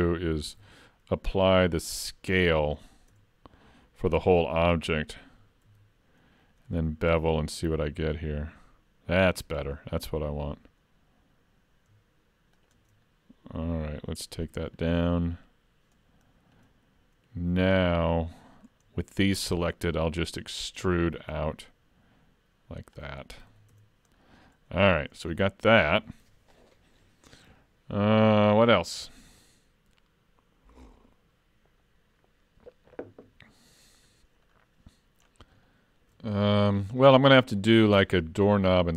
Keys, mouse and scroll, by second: 0.6 ctrl+a, 3.2 Tab, 5.6 ctrl+e, 13.1-14.4 scroll down 1, 14.4 click, 14.6 click, 14.8 click, 15.0 click, 15.2 click, 15.3 click, 16.3-17.1 scroll up 2, 16.7 middle click, 18.3 middle click, 18.9-19.4 scroll down 1, 19.4 middle click, 20.8 e, 23.5 alt+a, 23.7 Tab, 24.1-24.5 scroll down 3, 24.5 middle click, 25.4 shift+middle click, 34.5-35.3 scroll down 4, 35.3-35.7 scroll down 4, 35.7 shift+middle click, 37.4 middle click.